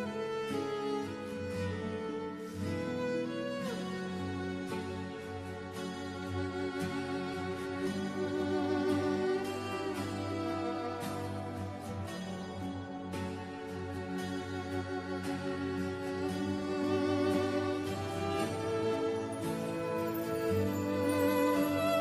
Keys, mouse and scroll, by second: 0.1-0.5 scroll up 1, 0.6 right click, 2.4 click, 4.7 KP_1, 4.9 KP_0, 4.9 KP_Enter, 6.3 click, 7.0 right click, 9.1 click, 11.5 KP_1, 12.0 KP_Enter, 13.0-15.2 scroll up 1, 15.2 click, 15.6 right click, 17.5 click, 19.7 KP_Subtract, 20.1 KP_1, 20.6 KP_Enter.